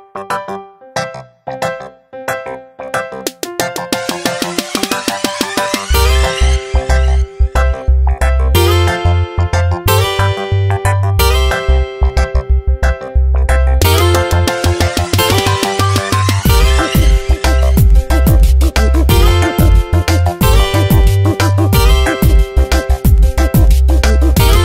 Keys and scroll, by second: 1.5 v, 6.6 space, 7.3 s, 16.5 v, 18.0 ctrl+z, 19.1 m, 20.3 space, 21.7 ctrl+j, 22.0 v.